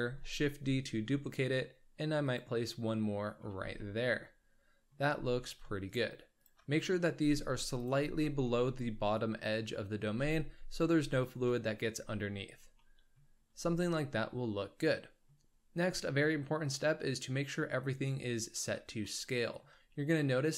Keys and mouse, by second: 0.0 shift+d, 3.0-3.4 drag, 3.4 z, 3.8 click, 3.9-4.9 middle drag, 5.0 z, 5.8 shift+click, 6.4 shift+click, 6.7 middle drag, 7.1 g, 8.0 z, 8.5 click, 10.0 g, 12.9 drag, 13.3 z, 13.8-15.4 drag, 19.1-19.6 shift+middle drag.